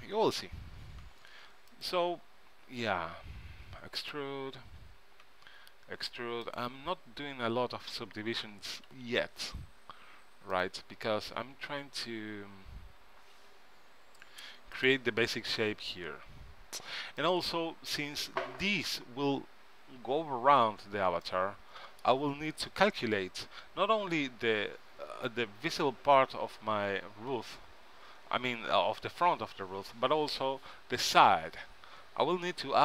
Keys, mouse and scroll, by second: 0.9 g, 2.6 e, 4.9 e, 8.7 e, 12.7 s, 15.5 g, 18.3 middle click, 22.7 KP_3, 24.5 z, 30.9 KP_1.